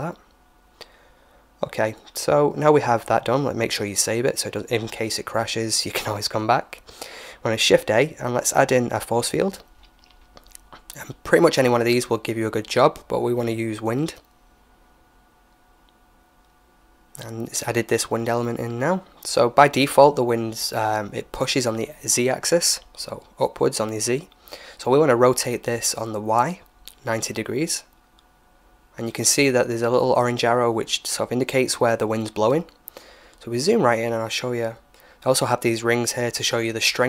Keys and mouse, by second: 0.9-3.4 drag, 2.5 ctrl+s, 4.2-6.5 middle drag, 6.0 shift+a, 17.8-19.6 drag, 19.6-24.9 middle drag, 23.8 r, 31.1 right click, 33.6-35.4 middle drag.